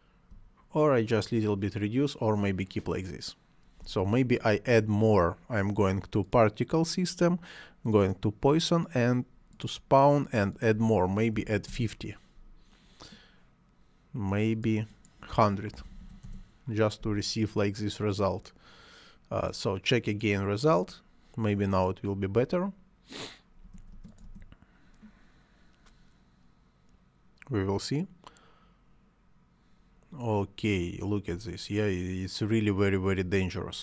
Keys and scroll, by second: 3.8 space, 4.2 Escape, 11.3 5, 11.6 Return, 15.7 1, 16.2 Return, 23.6 space, 31.3 space.